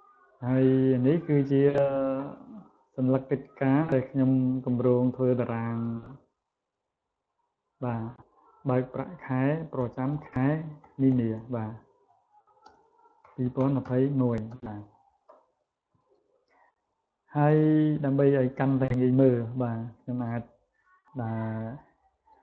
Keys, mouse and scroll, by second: 0.8 click, 1.2 right click, 3.4 click, 9.7-11.2 typing, 12.5-14.2 typing, 17.2 click, 17.8 click, 18.4 click, 19.0 click, 19.7 click, 21.0 right click.